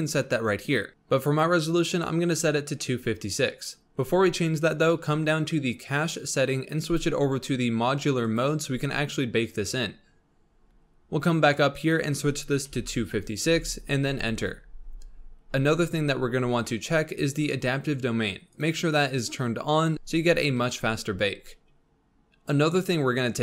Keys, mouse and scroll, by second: 0.9 drag, 4.0-5.4 scroll down 11, 5.4-6.1 scroll down 2, 6.8-9.9 drag, 10.5-11.7 scroll up 11, 11.7-14.9 drag, 15.3-18.7 scroll down 7, 18.7-19.6 drag.